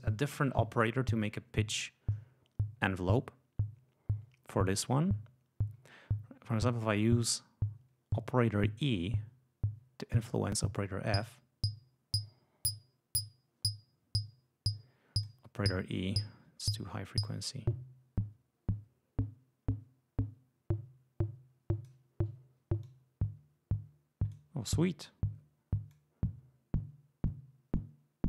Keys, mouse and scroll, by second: 7.1 click, 10.5-15.3 drag, 17.2-22.0 drag, 22.7-24.4 drag, 25.8-28.2 drag.